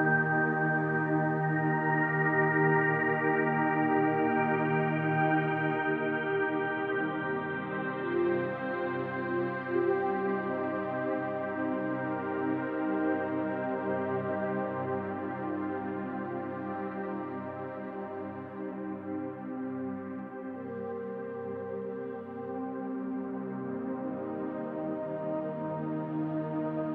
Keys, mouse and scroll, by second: 0.8-2.9 middle drag, 1.7 KP_1, 2.9 click, 5.3-8.5 middle drag, 6.1 KP_1, 7.9 e, 8.5 click, 9.8 g, 10.5 click, 11.3 g, 13.0 click, 13.5 g, 14.6 click, 15.2 g, 16.4 click, 16.9 g, 17.6 click, 18.1 g, 19.0 ctrl+click, 19.4 middle click, 20.1-21.4 drag, 21.4-26.9 middle drag.